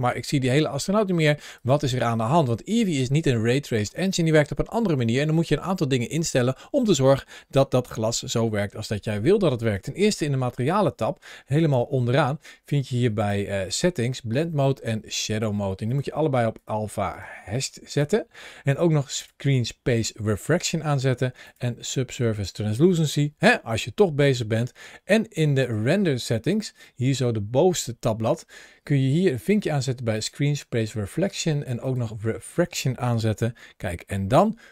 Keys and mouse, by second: 0.9 g, 1.4 click, 9.5 click, 13.0 click, 13.5 drag, 15.7-16.5 drag, 16.9-17.8 drag, 19.0 click, 21.3 click, 25.4 click, 26.3 click, 29.2 click, 30.0 click, 31.8 click, 33.1 g.